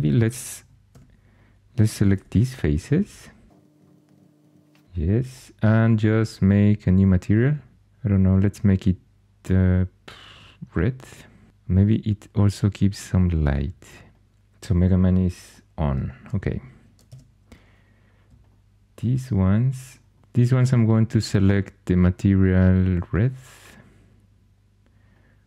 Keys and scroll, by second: 0.8 3, 2.0-4.8 typing, 16.9 Tab, 20.1 super+z.